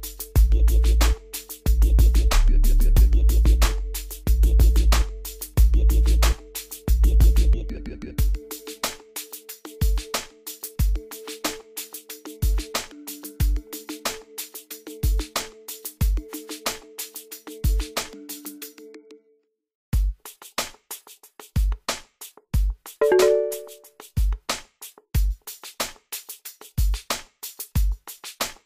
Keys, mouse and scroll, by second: 3.3 click, 18.0 click, 26.8 click.